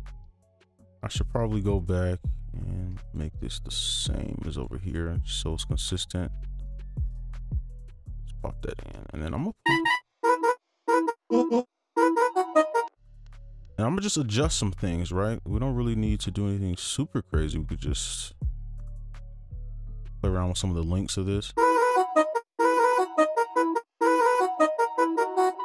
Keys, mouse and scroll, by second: 0.0-2.1 scroll, 2.1 scroll up 1, 2.2-3.0 scroll down 1, 3.0 ctrl+click, 3.4 shift+Down, 3.6 shift+Down, 4.5 ctrl+click, 4.8 right click, 5.1-6.6 scroll up 1, 6.6 right click, 9.0 ctrl+a, 9.6 space, 10.1 ctrl+Down, 10.2 ctrl+space, 11.0-12.8 typing, 11.2 ctrl+Down, 11.7 ctrl+Up, 12.4-12.8 scroll up 1, 13.0 right click, 13.2-17.4 scroll up 1, 17.4 double click, 18.1 right click, 18.6 ctrl+click, 20.4 right click, 21.5 space, 22.3 space, 22.5 space, 23.7 space, 23.9 space, 24.9 click.